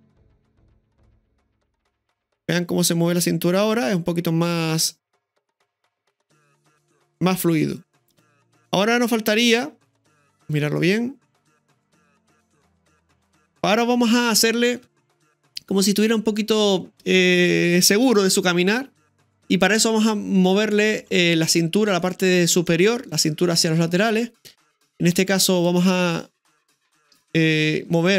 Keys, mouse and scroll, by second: 0.3 click, 0.5 space, 3.7-4.1 scroll down 2, 4.3-5.3 middle drag, 8.7-10.2 middle drag, 10.2-11.8 drag, 11.8-13.6 middle drag, 14.3-19.3 scroll up 2, 14.8 space, 21.5-21.9 scroll up 1, 22.0 shift+middle click, 22.7-24.4 middle drag, 26.4 click, 27.5 scroll up 1, 28.0-28.1 shift+middle drag.